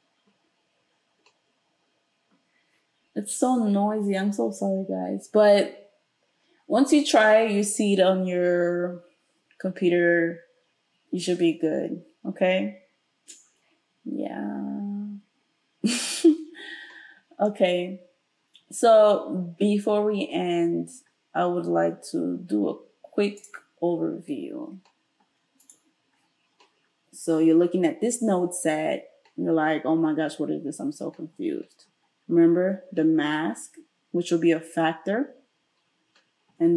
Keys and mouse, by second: 23.4-25.7 middle drag, 25.7 right click, 26.0-36.7 middle drag.